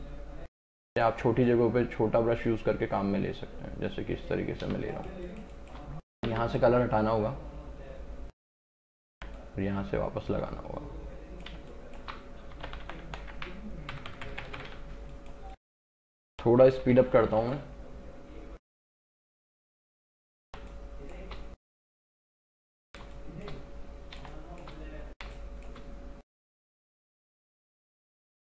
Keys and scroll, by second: 4.8 space, 6.3 x, 9.2 x, 11.7 space, 12.6 ctrl+KP_Subtract, 14.0 ctrl+KP_Add, 14.8 space, 16.7 ], 20.6 space.